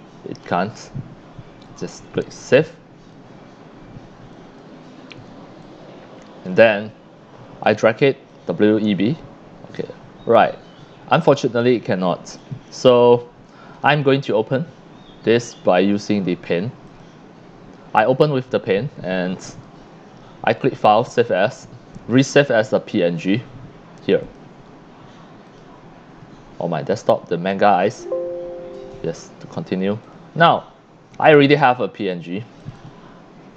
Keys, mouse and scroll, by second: 2.2 click, 4.3 click, 5.6-6.5 drag, 7.6 click, 8.3-11.4 drag, 12.4 click, 13.8 right click, 15.3 click, 16.9 click, 18.2 scroll down 1, 19.2 click, 24.2 click, 25.5 click, 27.6 click, 32.6 click, 32.7 click.